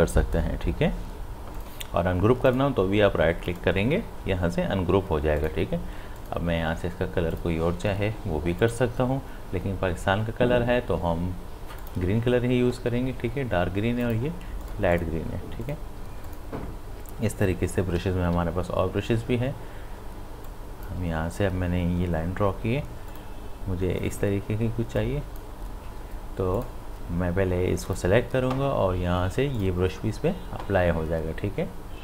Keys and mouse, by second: 3.5 right click, 5.4 click, 11.8 click, 14.0 click, 18.0 b, 20.5-26.5 drag.